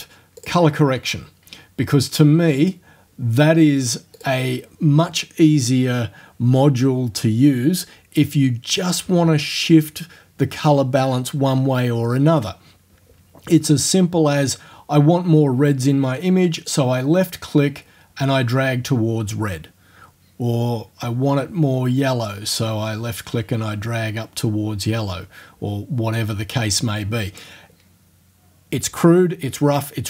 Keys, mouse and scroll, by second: 0.4 click, 2.6 click, 4.2 click, 16.7-27.6 drag.